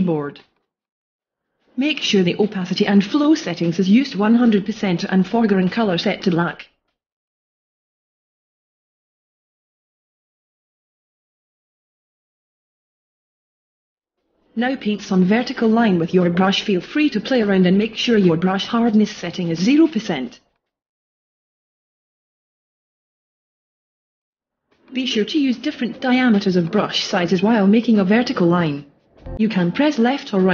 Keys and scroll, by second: 13.0 ], 16.9 ], 21.9 [, 22.9 ], 25.5 [, 27.2 [, 28.7 [.